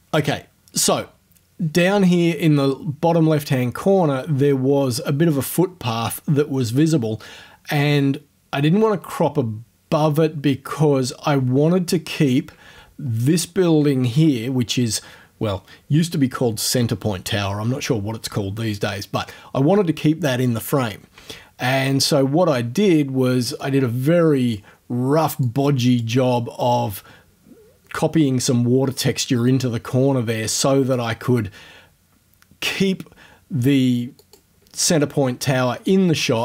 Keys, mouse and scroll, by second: 13.0-13.6 ctrl+scroll up 2, 23.6-24.7 drag, 25.4 click, 31.0-32.9 drag, 32.9-34.2 middle drag, 34.2 click, 34.6-35.9 middle drag, 35.9 click.